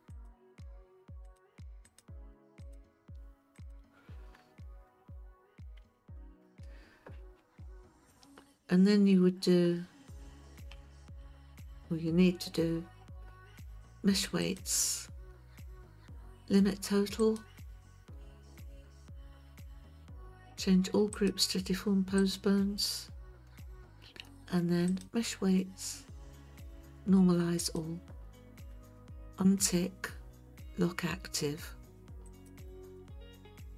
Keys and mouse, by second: 0.1 click, 1.2 click, 1.9 click, 2.6 click, 3.6 click, 5.8 Tab, 10.8 KP_1, 14.6-17.5 drag, 21.2-22.3 drag, 25.0-27.8 drag, 32.3 click.